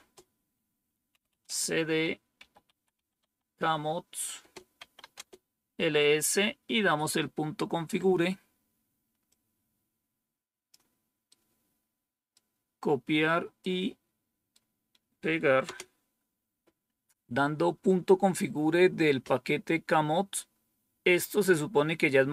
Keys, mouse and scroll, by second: 1.4 typing, 2.6-5.4 typing, 9.2-10.7 drag, 11.2-12.3 right drag, 13.5 right click, 15.6 Return.